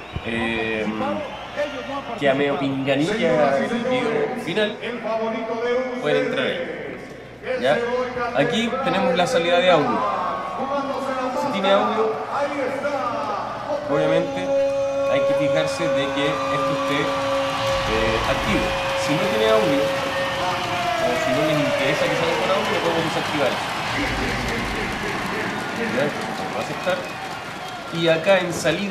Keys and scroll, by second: 28.8 alt+super++.